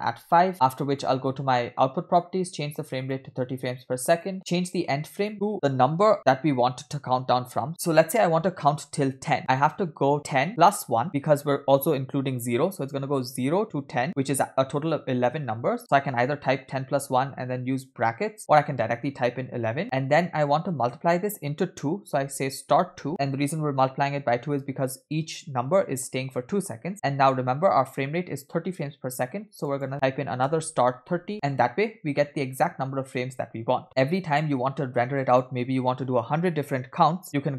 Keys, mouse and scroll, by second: 3.0-4.3 drag, 5.2-31.4 drag, 19.8 Right.